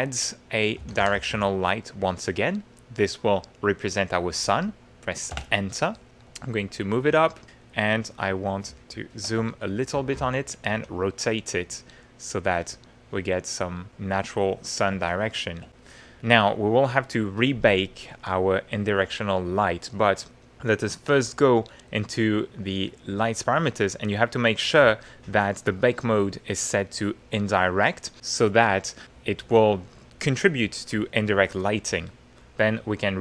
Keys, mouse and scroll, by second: 0.6-1.8 typing, 5.3 Return, 6.2-7.3 drag, 7.3-8.6 middle drag, 8.8 ctrl+middle click, 9.5 ctrl+shift+middle click, 9.7 ctrl+shift+click, 9.9 shift+click, 10.3 shift+middle click, 10.7 shift+e, 11.2-14.4 middle drag, 15.0-16.2 shift+middle drag, 20.2 click, 26.1 click, 27.2 click, 32.6 click.